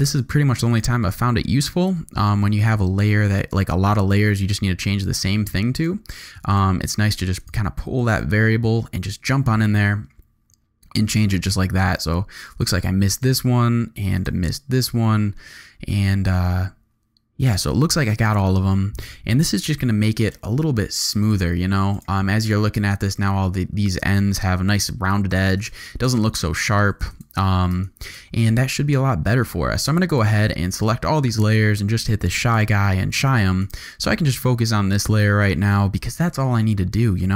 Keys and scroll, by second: 19.6 super+u, 21.1 z, 25.3 z, 26.1 alt+space, 26.7 z, 27.7 alt+space, 28.3 z, 29.2 g.